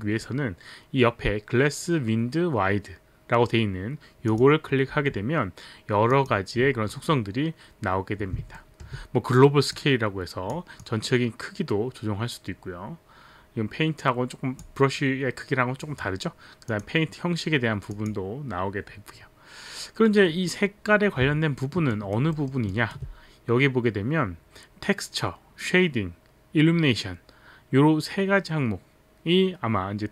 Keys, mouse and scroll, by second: 4.3 click, 6.1 click, 8.6 alt+middle click, 9.8 click, 16.7 click, 17.9 click, 18.0 click, 21.6 alt+middle click, 21.9 alt+right click, 22.4 alt+middle click, 22.7 alt+right click, 22.7 alt+middle click.